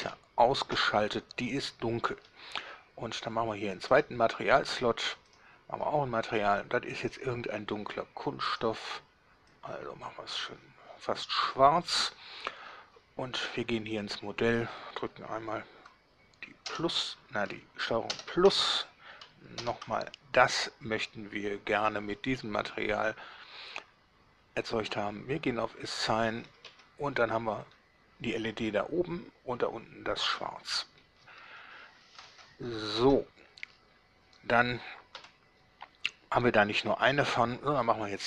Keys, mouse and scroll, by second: 0.1 1, 0.8 Return, 4.0 click, 5.4 drag, 7.1 drag, 8.5 click, 9.7-10.7 drag, 13.5 Tab, 20.5-22.1 ctrl+middle drag, 26.1 click, 26.8 Tab, 27.9-30.5 middle drag, 30.5 scroll down 1, 31.3 Tab, 32.0-32.3 scroll down 2, 33.2 Tab, 33.8 scroll down 2, 34.1 scroll up 2, 35.4 7, 37.7 scroll down 2.